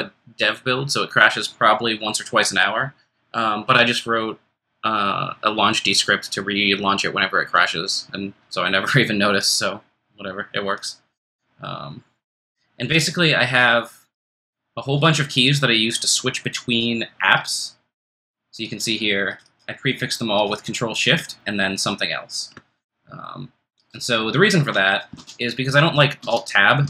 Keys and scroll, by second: 25.1 super+q, 26.2 super+Tab, 26.8 super+Tab.